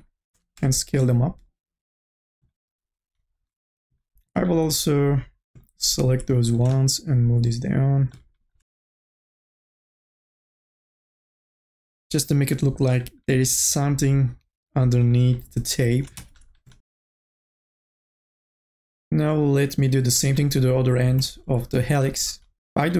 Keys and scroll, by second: 0.3 t, 4.5 ctrl+z, 16.4 ctrl+z.